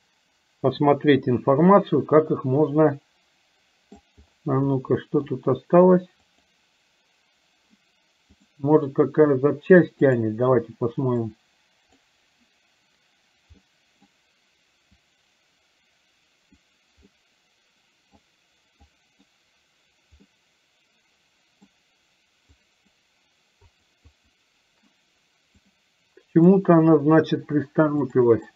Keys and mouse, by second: 4.9 middle click, 6.4 click, 8.4-10.6 drag, 11.2 click, 13.7 middle click, 15.1-16.9 drag, 17.2-18.2 middle drag, 18.9 click, 20.4-21.7 middle drag, 22.6 click, 24.1 click, 25.7 click, 28.2 click.